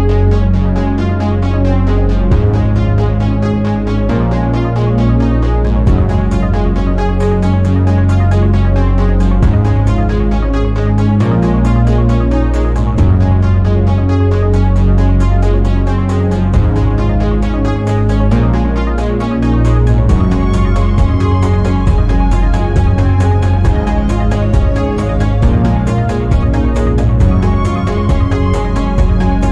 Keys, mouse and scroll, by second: 0.0 shift+click, 0.4 middle click, 0.8 scroll down 1, 1.0 middle click, 1.5-1.9 scroll up 1, 1.9 shift+middle click, 2.3-3.1 scroll up 1, 3.1 ctrl+b, 7.3-8.0 scroll down 1, 8.0-9.9 shift+middle drag, 11.1 shift+middle click, 11.8-12.1 scroll up 2, 12.1-14.0 middle drag, 14.0-15.5 shift+middle drag, 15.5 ctrl+z, 16.0-17.4 scroll down 1, 17.4 ctrl+b, 21.1 scroll down 1, 21.3 shift+middle click, 21.7 scroll up 2, 22.0 shift+middle click, 22.6 scroll up 1, 23.2 1, 23.6 click, 24.4 g, 25.3 middle click, 26.0 click, 26.2 g, 27.4 shift+middle click, 28.1-28.4 scroll up 1, 28.4 shift+middle click, 29.3 2.